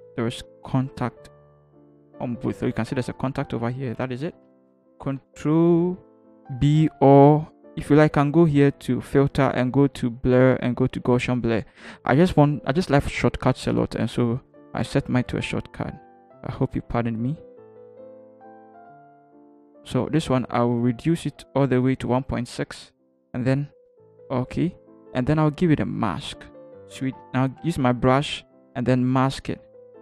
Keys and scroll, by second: 0.0 Up, 0.2 Up, 0.4 Up, 0.5 Up, 0.8 Up, 1.0 Up, 4.5 Return, 5.0 b, 27.4 b.